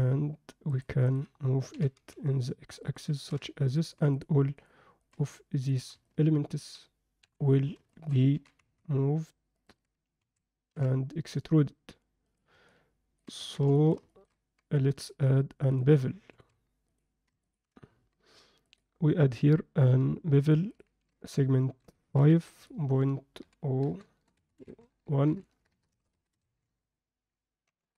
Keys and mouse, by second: 1.0 click, 1.7 g, 3.2 ctrl+alt+middle drag, 3.7 drag, 4.6 shift+drag, 5.0 shift+click, 5.6 shift+drag, 6.0-6.6 alt+middle drag, 7.2 KP_1, 7.9 alt+shift+middle click, 8.3 g, 9.6 Tab, 10.2 a, 10.7 e, 12.6 middle click, 13.4 Tab, 13.8 alt+shift+middle click, 14.1 ctrl+alt+middle click, 15.0-15.8 drag, 16.3 ctrl+a, 17.4 ctrl+middle drag, 18.6 click, 20.7-22.3 drag, 22.6-27.8 drag, 24.1 BackSpace, 25.4 BackSpace.